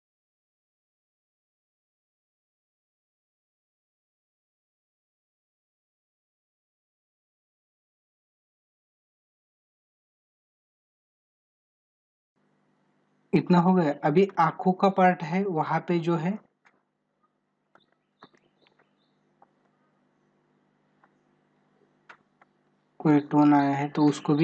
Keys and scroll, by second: 1.3 space.